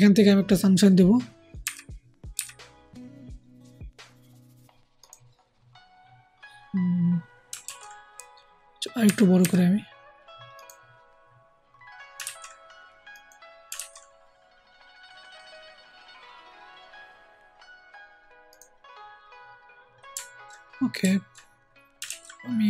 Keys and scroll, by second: 1.6 ], 2.3 ], 7.6 ctrl+z, 9.0 ], 9.3 ], 12.2 ctrl+z, 13.7 ctrl+z, 22.0 ctrl+z.